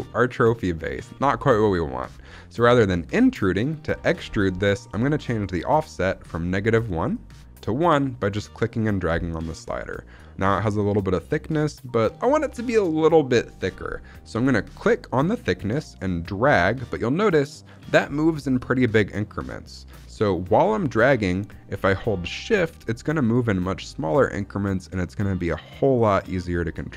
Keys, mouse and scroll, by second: 0.2-1.0 middle drag, 7.0-8.2 drag, 9.3-9.7 scroll up 1, 11.6 middle click, 15.0-26.9 drag.